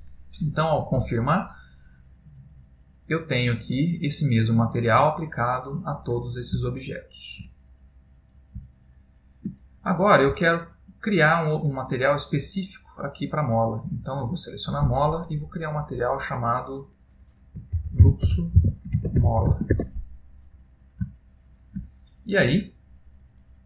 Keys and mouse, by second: 2.7 middle click, 6.9 middle click, 7.6 shift+middle click, 8.8 ctrl+middle click, 10.3 middle click, 13.7 middle click, 14.0 click, 15.7 click, 17.3 click, 21.3 shift+middle click, 22.0 middle click, 23.3 middle click, 23.5 shift+middle click.